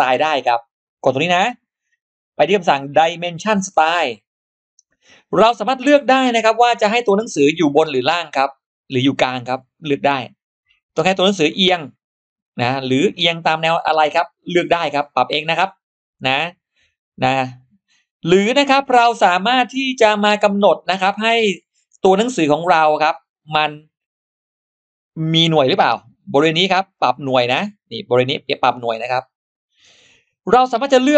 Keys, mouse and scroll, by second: 0.8 click, 3.8 click, 6.6 click, 8.3 click, 9.6 click, 11.3 click, 12.6 click, 13.6 click, 14.5 click, 16.0 click, 17.2 click, 18.3 click, 20.6 click, 22.8 click, 25.2 click.